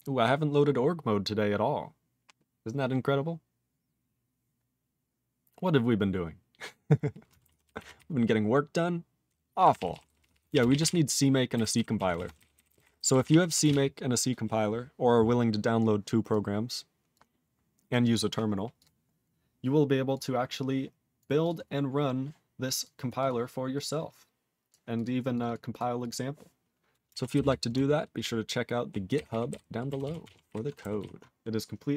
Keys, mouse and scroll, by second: 6.3 ctrl+Return, 7.5 ctrl+=, 7.9-9.2 ctrl+n, 9.6 ctrl+p, 9.8 ctrl+p, 9.9 ctrl+p, 10.0 ctrl+p, 10.2 ctrl+p, 10.3 ctrl+p, 10.4 ctrl+space, 10.5 ctrl+e, 10.6 ctrl+n, 10.8 ctrl+e, 11.5 ctrl+g, 11.6 ctrl+n, 11.7 ctrl+n, 12.0 ctrl+a, 12.1 ctrl+space, 12.2 ctrl+n, 12.3 ctrl+n, 12.5 ctrl+n, 12.7 ctrl+n, 12.7 ctrl+g, 12.8 ctrl+n, 12.9 ctrl+n, 13.1 ctrl+n, 13.2 ctrl+n, 13.3 ctrl+e, 13.6 ctrl+space, 13.7-14.4 ctrl+p, 15.8 click, 16.3 click, 17.1 click, 17.9 click, 18.7 click, 18.8 click, 19.0 scroll down 3, 20.1 click, 21.1 click, 21.4 click, 21.4 click, 21.6-22.8 scroll up 6, 22.8 click, 23.0 click, 23.1 click, 23.2 click, 23.7 click, 24.7 click, 24.9 click, 25.0 click, 25.3 click, 25.4 click, 25.4 double click, 25.5 double click, 25.7 click, 25.7 click, 26.0 click, 26.0 click, 27.4 Return, 28.2-28.8 ctrl+p, 29.1 ctrl+n, 29.3 ctrl+e, 29.5 ctrl+b, 30.0 ctrl+s, 30.2 ctrl+alt+f, 30.4 ctrl+alt+b, 31.0 ctrl+s, 31.5 ctrl+s.